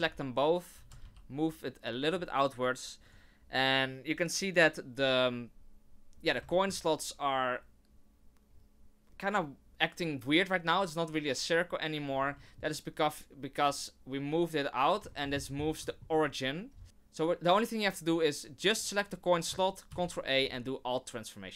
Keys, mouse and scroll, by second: 0.0-0.7 scroll down 3, 0.7 g, 6.1 scroll down 3, 6.5 shift+middle click, 12.4 shift+middle click, 13.6 right click, 15.1 shift+middle click, 15.3-15.8 scroll up 9, 15.9 shift+middle click, 16.0 shift+scroll down 1, 16.7 scroll down 2, 18.7 right click, 19.9 ctrl+a.